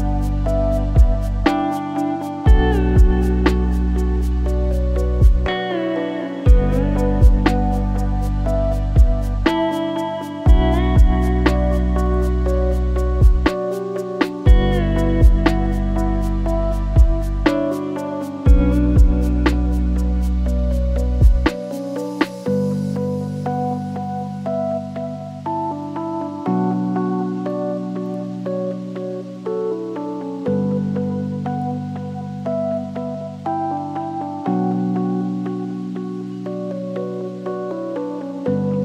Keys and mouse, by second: 2.0 click, 2.6 g, 5.5-6.4 drag, 7.9 ctrl+l, 9.8 shift+middle click, 13.3-14.0 drag, 15.2 click, 16.2 r, 17.4 g, 18.9 s, 19.7 ctrl+z, 20.1 ., 20.8 s, 26.0 click, 27.8 click, 29.8-30.2 shift+middle drag, 35.1 middle click.